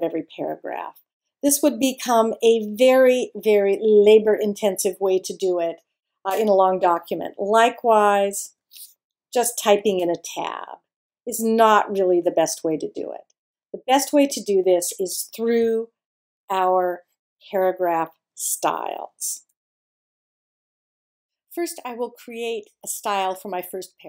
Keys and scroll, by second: 7.4 BackSpace, 9.8 Tab, 12.4 super+z.